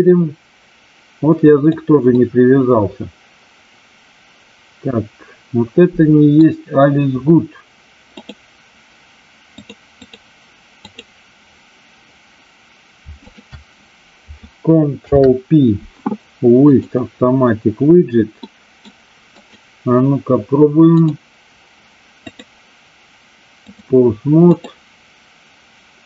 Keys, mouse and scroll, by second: 2.2-6.3 middle drag, 9.5-10.2 drag, 10.7 click, 13.2 shift+click, 14.9 ctrl+p, 18.4 middle click, 19.4 click, 20.9 click, 22.3-23.7 drag, 24.5 click, 25.9-26.0 drag.